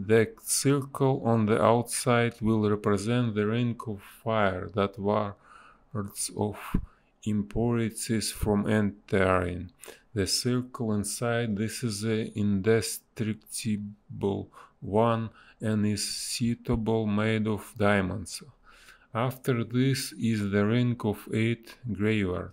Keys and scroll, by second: 0.7 space, 1.7 space, 2.3 b, 2.5 space, 5.7 ctrl+z, 6.8 space, 8.5 space, 10.1 ctrl+z, 13.1 space, 16.1 space, 16.6 ctrl+z, 18.0 space, 20.8 a.